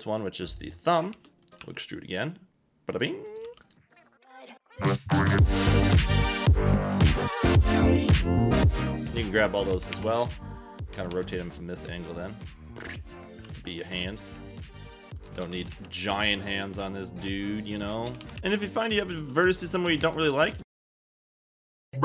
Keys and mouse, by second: 0.5 click, 1.1 g, 1.4 click, 1.6 e, 2.9 click, 3.4-8.9 typing, 3.6 click, 4.9 click, 5.0 click, 5.6 click, 6.4 Escape, 7.0 click, 7.6 ctrl+a, 8.0 click, 8.3 ctrl+z, 8.7 click, 8.7 click, 9.9 KP_1, 10.9 r, 11.1 r, 13.1 click, 13.4-15.7 typing, 14.0 click, 14.5 click, 16.8 g, 17.6 click, 18.0 a, 18.2 a, 18.4 ctrl+z, 18.4 x, 18.7 click, 19.2 g, 20.0 Escape.